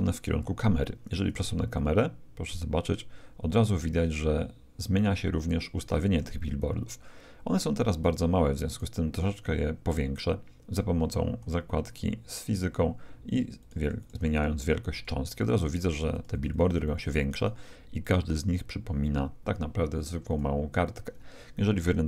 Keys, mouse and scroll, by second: 1.4 g, 8.7-10.6 right drag, 11.0-12.5 middle drag, 12.5-19.7 drag, 20.3-21.9 drag.